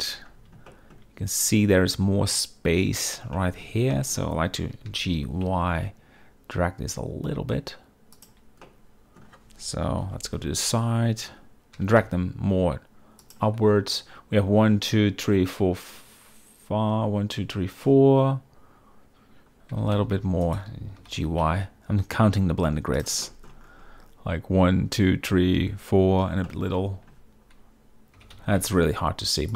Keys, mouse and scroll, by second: 0.8 shift+middle drag, 3.5 shift+middle drag, 4.0 shift+middle drag, 5.0 g, 5.3 y, 8.8-9.3 middle drag, 10.1 KP_3, 11.9 g, 12.1 z, 19.8 g, 20.1 x, 20.5 shift+click, 21.1 g, 21.3 y, 23.4 shift+drag, 26.6 shift+middle drag, 28.3 g, 28.4 y.